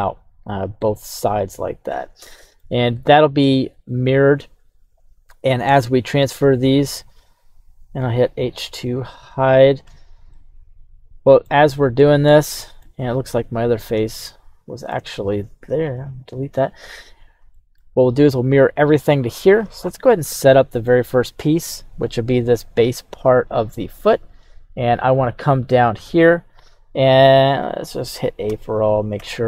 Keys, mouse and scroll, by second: 5.8-6.5 shift+middle drag, 7.2 right click, 8.5 h, 9.2 right click, 9.8 h, 10.3-11.5 middle drag, 11.9-12.8 middle drag, 13.0 right click, 13.5-13.9 scroll up 3, 14.1-14.9 shift+middle drag, 16.0 Delete, 16.8-17.2 scroll down 1, 17.5-17.8 shift+middle drag, 18.8 right click, 19.8-20.1 shift+middle drag, 20.3 middle click, 21.6 right click, 22.5 g, 23.3 right click, 25.8 click, 26.8-27.4 scroll down 1, 27.4-27.8 drag, 27.4-27.8 scroll down 1, 28.4 a, 29.2 m.